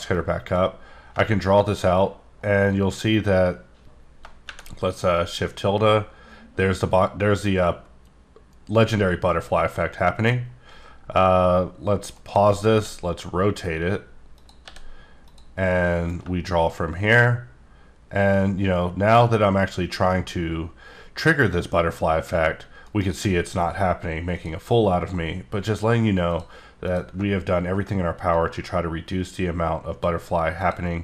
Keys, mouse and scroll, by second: 0.1 click, 12.1 right click, 12.7 r, 14.3 click, 14.6 g, 15.2 click, 16.1 click, 22.8 shift+right click, 24.3 click, 25.3-26.3 scroll up 1, 26.3 click, 26.8 click, 28.3 click, 30.6 click.